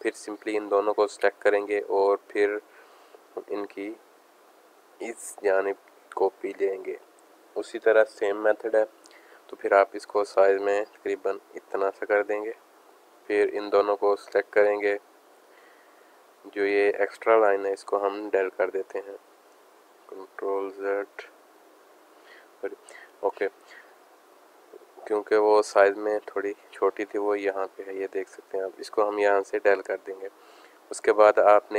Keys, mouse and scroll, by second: 1.6 click, 1.8 click, 10.2 click, 12.8 click, 14.0-16.4 drag, 16.8 click, 17.5 click, 21.8 ctrl+z, 22.5 click, 22.9-26.2 drag, 27.7 click, 31.0-31.7 drag.